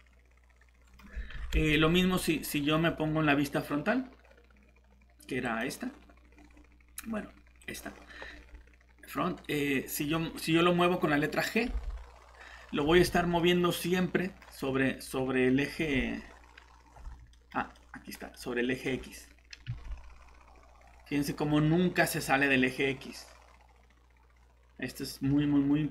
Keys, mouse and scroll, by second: 1.3 ctrl+z, 5.4 click, 11.6 g, 12.8 Escape, 13.1 scroll down 1, 13.4 middle click, 14.4 scroll up 1, 15.8 g, 17.0 Escape, 17.3 middle click, 19.7 g.